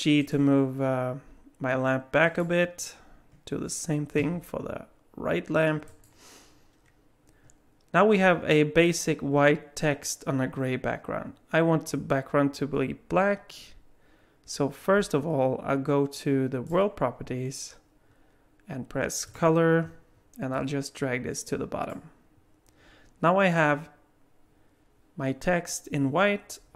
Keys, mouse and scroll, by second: 2.2 click, 4.2 g, 16.7 click, 19.3 click.